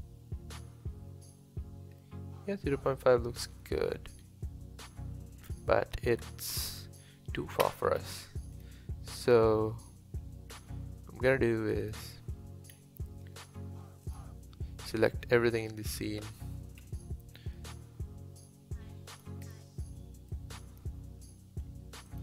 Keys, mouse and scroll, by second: 2.0-5.0 middle drag, 6.2 KP_7, 8.0-8.5 scroll down 1, 8.5 click, 10.6 s, 12.7 scroll down 1, 14.0 click, 15.0-16.8 drag, 16.8 KP_1, 17.6 s, 19.4 click, 20.3-22.2 drag.